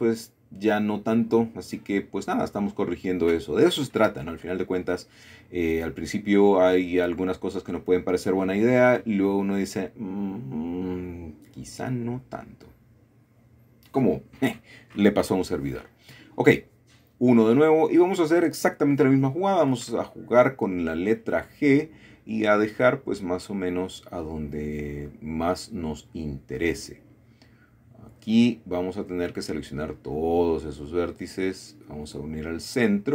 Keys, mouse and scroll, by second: 0.1 shift+middle click, 0.8-1.9 typing, 2.5-3.7 drag, 3.8 typing, 4.3 click, 5.5-6.5 typing, 7.1 click, 8.9 typing, 9.7 click, 10.7-12.4 middle drag, 14.1 middle click, 15.2-16.9 shift+middle drag, 15.2 typing, 16.9-18.6 typing, 22.0 click, 24.3 middle click, 26.4 shift+middle click, 27.1 typing, 28.8 typing, 29.3 click, 30.8 typing, 31.4 click, 31.9 click, 32.8 typing.